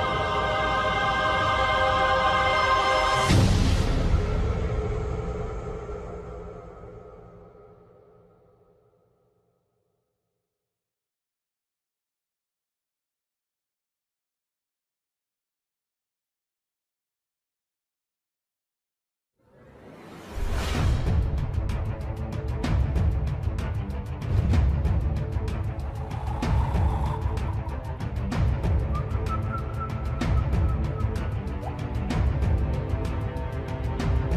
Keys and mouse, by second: 0.0 ctrl+click, 2.4 s, 4.3 KP_7, 7.0 s, 10.4 KP_3, 11.8 middle click, 13.2 middle click, 14.4 ctrl+z, 15.4 s, 17.7-18.9 middle drag, 19.6 shift+middle click, 21.3 middle click, 23.1 shift+middle click, 23.7 shift+middle click, 24.4 middle click, 27.9 KP_7, 29.1 shift+middle click, 30.1 shift+middle click, 32.3 shift+middle click, 33.2 shift+middle click.